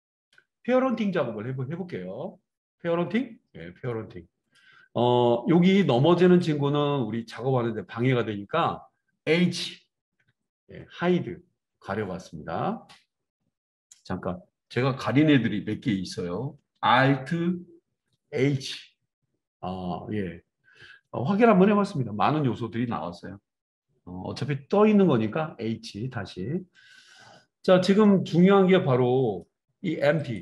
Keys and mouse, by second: 10.1 h, 18.6 alt+h, 20.1-30.3 drag, 25.6 h, 30.3-30.4 middle drag.